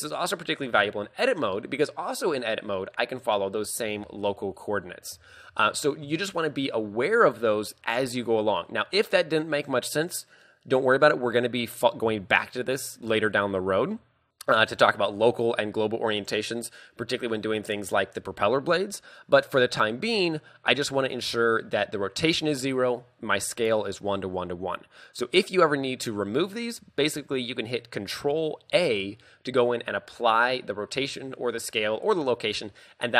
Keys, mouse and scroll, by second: 0.7 Tab, 2.4 click, 4.0 ctrl+z, 4.6 Tab, 5.2 ctrl+z, 5.6 ctrl+z, 7.4 KP_3, 8.0-8.6 scroll up 7, 14.4-15.0 scroll down 1, 15.0 middle click, 15.8 scroll up 1, 17.1-17.8 scroll down 4, 20.2-20.7 scroll up 4, 23.9 scroll up 1, 28.8 ctrl+a.